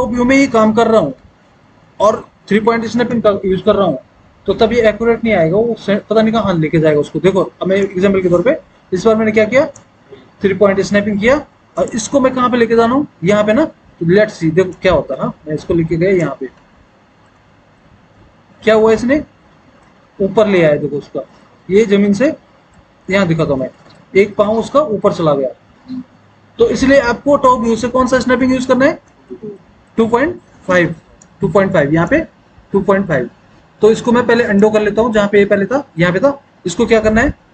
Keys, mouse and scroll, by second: 0.5 alt+w, 1.3 alt+w, 16.9 alt+w, 17.5 alt+w, 23.3 alt+w, 24.0 alt+w, 27.7 alt+w, 28.5 alt+w, 35.5 ctrl+z.